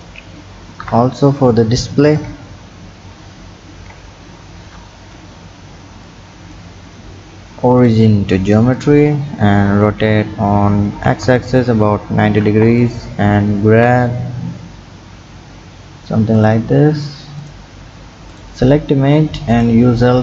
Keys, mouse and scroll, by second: 0.8 KP_1, 2.2 KP_3, 3.7 ctrl+KP_3, 4.7-6.1 scroll up 1, 6.1-9.7 drag, 9.7 r, 13.7 g, 17.4 click, 17.8 scroll up 1, 18.3 click, 19.5 click, 20.0-20.2 drag.